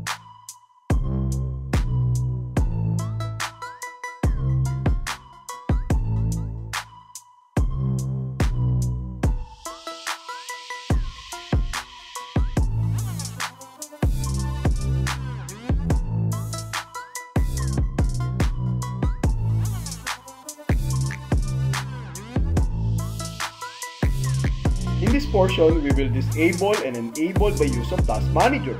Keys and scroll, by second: 0.0 Tab, 1.3 Tab, 3.3 Delete, 5.3 alt+a, 7.3 Return, 9.3 Tab, 11.1 Tab, 13.1 Left, 14.2 Left, 15.7 BackSpace, 17.6 BackSpace, 18.9 Left.